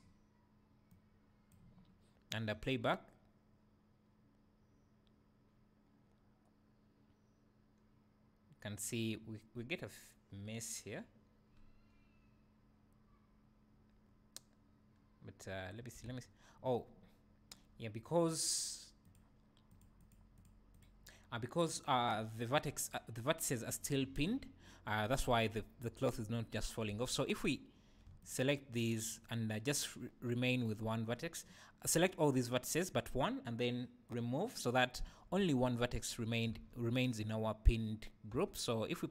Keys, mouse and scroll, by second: 2.5 space, 2.7 space, 16.1 Escape, 19.7 click, 20.0 click, 26.9 Tab, 27.4 click, 28.2 ctrl+click, 34.1 click, 35.1 Tab, 36.6 alt+a, 38.3 Tab.